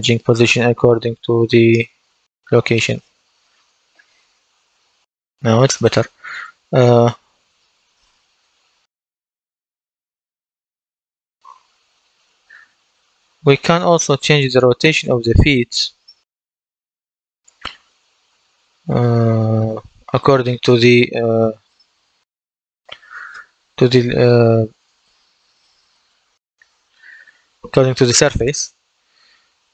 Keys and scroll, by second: 2.4 d, 10.9 w, 28.6 w.